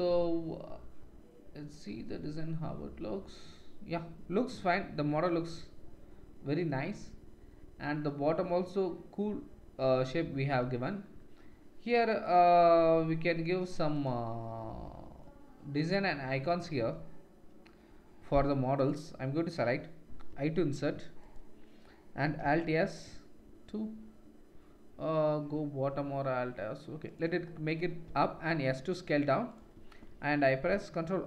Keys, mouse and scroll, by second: 9.9 middle click, 10.1 middle click, 10.6 Tab, 11.1-12.2 middle drag, 12.2 click, 12.3 middle click, 12.9 middle click, 13.3 middle click, 13.9 click, 14.0 middle click, 14.8 middle click, 15.0 middle click, 15.1-16.2 middle drag, 16.3-18.4 middle drag, 18.4 3, 21.2 i, 22.4 alt+s, 28.3 s, 30.1 ctrl+r.